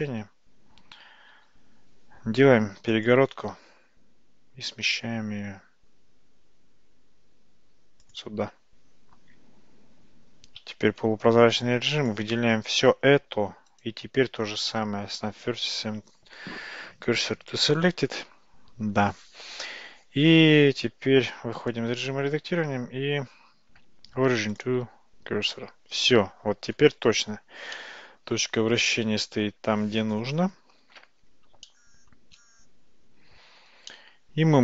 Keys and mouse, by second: 0.2 a, 1.4 ctrl+r, 10.6 alt+z, 13.9-17.7 right drag, 21.3 Tab, 21.7-24.7 right drag, 25.5 Tab, 26.4 Tab, 27.8-31.0 middle drag, 31.7-32.2 shift+middle drag, 34.0-34.6 middle drag.